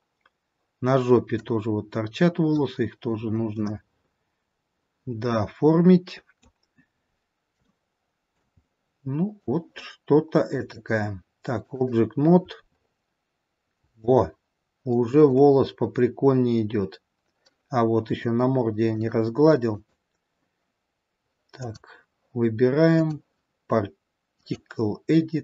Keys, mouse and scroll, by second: 0.2-1.0 scroll down 1, 1.6 click, 3.8 middle click, 7.2-7.7 scroll down 3, 7.8 shift+middle click, 8.9 middle click, 10.6 click, 13.0-13.5 scroll up 4, 14.3 shift+middle click, 15.9 scroll down 1, 16.7-17.2 scroll down 1, 18.9 click, 19.9 click, 22.9 click.